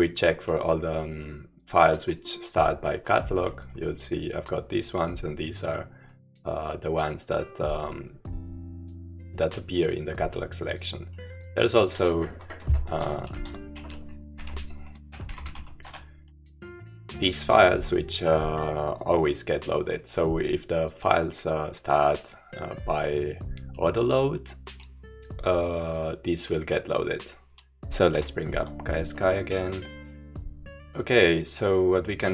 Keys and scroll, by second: 3.1 Return, 12.5-16.0 typing, 27.9 Left, 27.9 Return, 27.9 Up, 27.9 typing, 28.1 super+-.